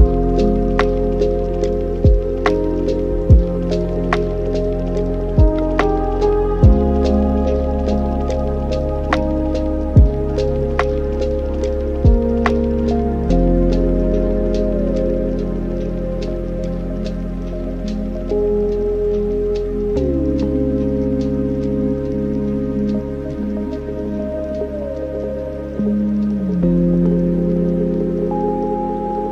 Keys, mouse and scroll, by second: 0.1 drag, 1.0-1.5 middle drag, 1.5-2.0 scroll up 4, 2.0-4.3 drag, 5.6 click, 6.2-7.2 alt+right drag, 7.2 ctrl+shift+click, 9.2-12.4 right drag, 14.6 middle click, 15.2-16.0 scroll up 6, 16.0-19.1 shift+drag, 19.1-22.2 drag, 22.6 scroll down 4, 23.1 middle click, 24.1 ctrl+shift+click, 25.3 drag, 29.1-29.3 middle drag.